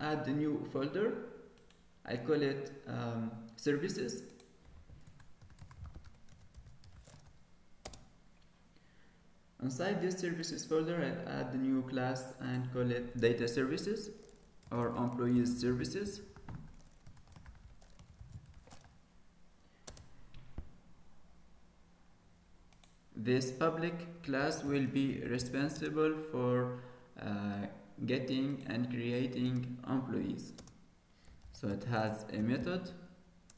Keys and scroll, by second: 13.4 alt+shift+c.